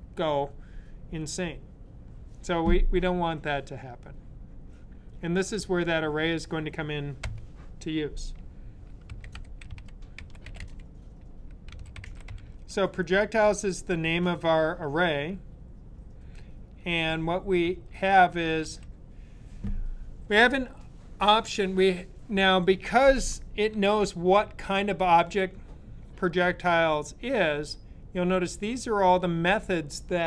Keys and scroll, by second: 8.7-12.6 typing, 20.5-21.2 typing.